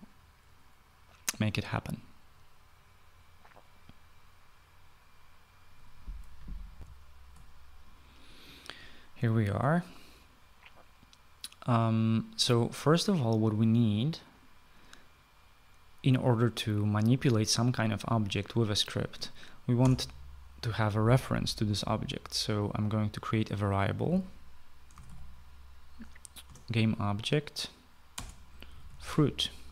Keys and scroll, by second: 7.2 shift+F9, 7.3 shift+F9, 20.3 Return, 24.5-26.0 typing, 26.9 Return, 28.6-29.7 typing.